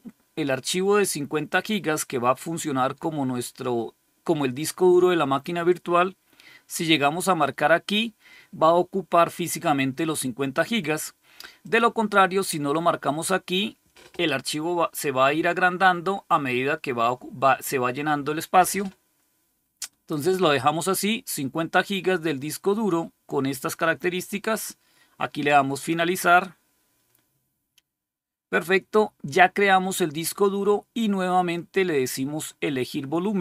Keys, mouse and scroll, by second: 7.3 click, 11.5 click, 25.7 click.